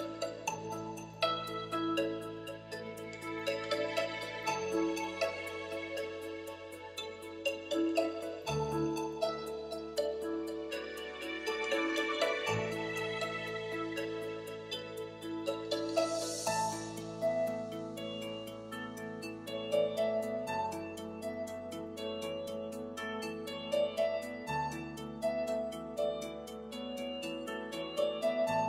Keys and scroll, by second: 11.0-12.0 typing.